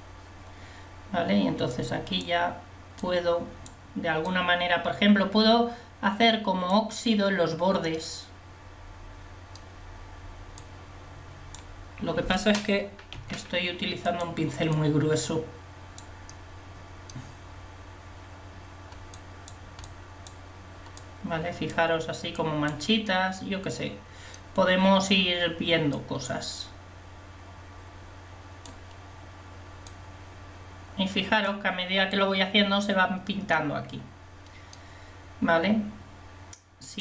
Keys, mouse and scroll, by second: 8.0-9.0 middle drag, 10.7-13.3 drag, 13.3 f, 14.8-16.6 drag, 19.2-24.1 drag, 33.8-34.9 drag.